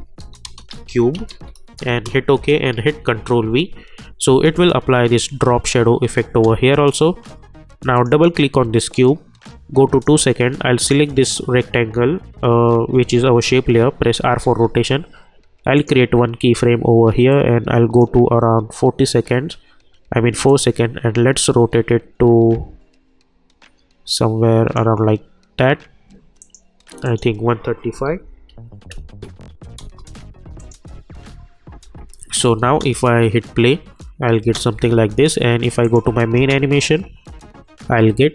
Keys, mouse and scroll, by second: 0.0-1.8 typing, 1.8 Return, 2.7 ctrl+v, 4.3 space, 6.3 space, 7.9-10.8 drag, 14.0 r, 15.7-20.4 drag, 20.4-26.4 drag, 29.8 Return, 30.6 click, 31.8 j, 32.6 space, 34.7 j, 35.8 click, 36.3 space.